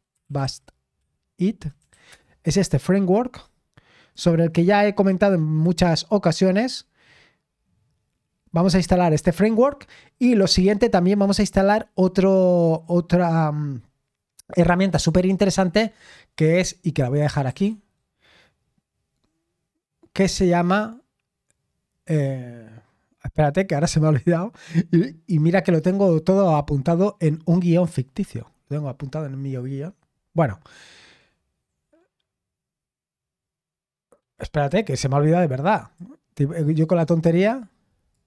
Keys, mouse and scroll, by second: 0.2 typing, 1.8 Down, 2.1 Return, 2.3 typing, 4.1-5.3 drag, 6.2-9.9 scroll down 1, 17.0 ctrl+click, 17.5 ctrl+t, 35.7-38.2 drag.